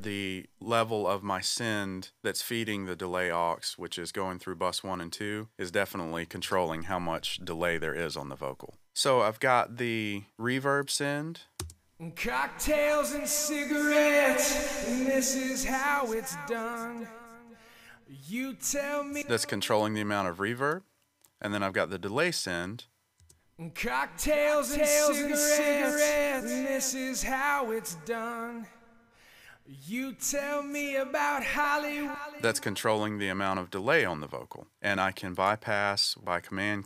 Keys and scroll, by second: 11.6 space, 19.1 space, 23.2 space, 32.0 space.